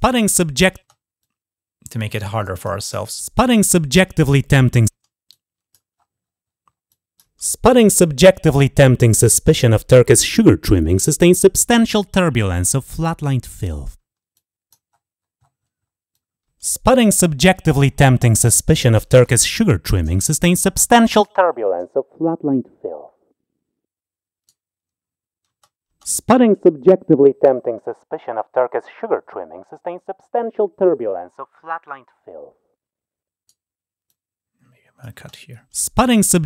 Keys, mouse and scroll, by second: 1.0-2.4 drag, 5.0 click, 5.8 scroll up 2, 6.0 scroll down 2, 6.6 click, 7.7-13.4 drag, 14.1 click, 14.9 scroll up 2, 15.0-15.9 scroll down 2, 15.9-17.5 drag, 17.7 scroll up 2, 18.1 click, 19.0 shift+click, 20.2 click, 21.0-24.2 right drag, 26.1-33.3 right drag, 28.5 scroll up 1, 28.9 scroll down 1, 29.8 scroll down 1, 33.8 click.